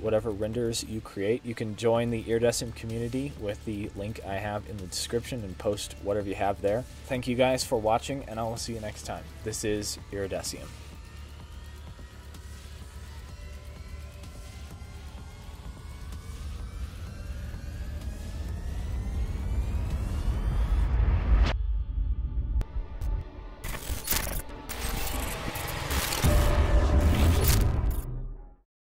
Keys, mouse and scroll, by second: 26.3 m.